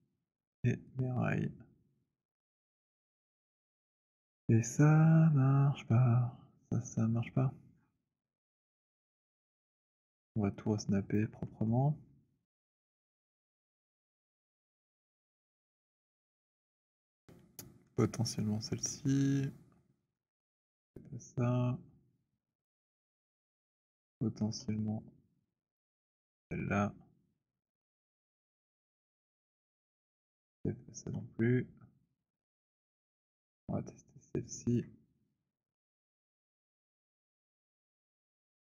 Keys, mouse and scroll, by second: 0.2 click, 1.2 click, 7.6-9.5 scroll, 9.5 click, 11.2 alt+click, 11.8-13.0 alt+middle click, 12.6 alt+middle click, 14.0 click, 14.3 w, 15.1 c, 16.1 middle click, 17.2-20.1 typing, 20.1 middle click, 21.4 click, 21.8-30.9 typing, 24.6 middle click, 27.1-29.6 middle drag, 30.9-32.7 middle drag, 32.7 click, 32.7 typing, 34.4 right click, 35.7 click, 38.0-38.7 typing.